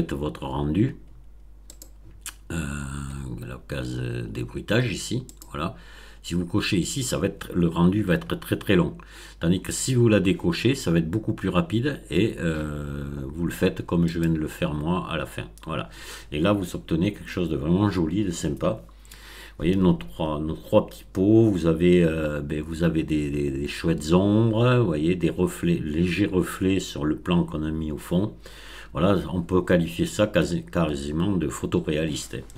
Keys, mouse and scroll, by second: 0.0-0.3 scroll up 2, 1.7 click, 2.6-3.0 scroll up 1, 5.2 click, 14.0 click.